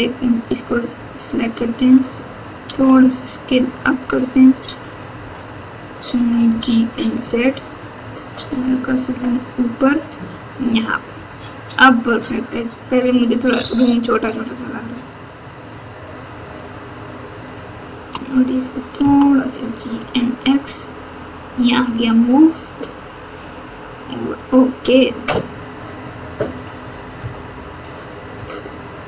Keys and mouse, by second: 1.4 click, 2.6 s, 6.4 g, 12.1 click, 14.0 shift+click, 14.8 shift+click, 16.4 shift+click, 17.5 shift+click, 19.0 g, 23.0 click, 25.1 click, 26.0 click, 27.2 KP_Add, 28.3 KP_2.